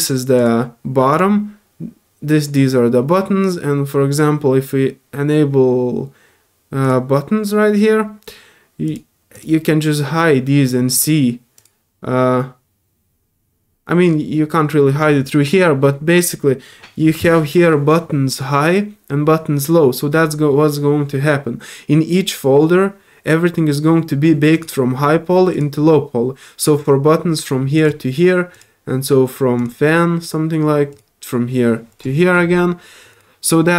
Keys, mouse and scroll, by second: 0.3 click, 1.1 click, 6.8 click, 8.8 click, 9.3 click, 10.9 click, 11.5 click, 14.0 scroll down 1, 24.5 click, 25.5 click, 26.8 click, 27.7 click, 28.5 click, 29.6 click, 30.9 click, 31.9 click, 33.1 click.